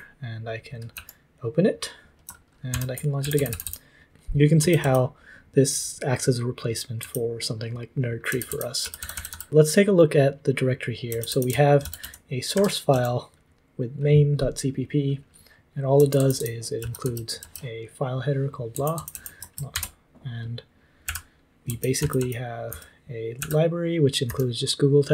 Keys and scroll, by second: 0.0-0.9 typing, 2.3-4.8 typing, 2.7 ctrl+t, 7.0-9.5 typing, 10.8-12.9 typing, 15.7-19.5 typing, 19.5 ctrl+p, 19.5 ctrl+c, 19.7 ctrl+t, 21.0-24.3 typing.